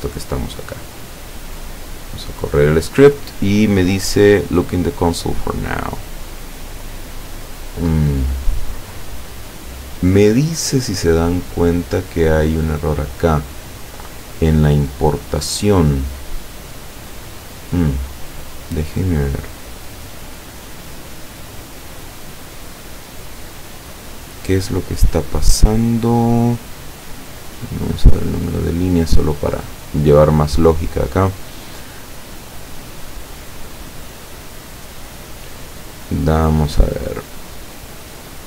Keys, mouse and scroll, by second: 1.5 click, 12.5 click, 19.3-21.6 middle drag, 22.1 middle click, 27.5 click, 37.3 click.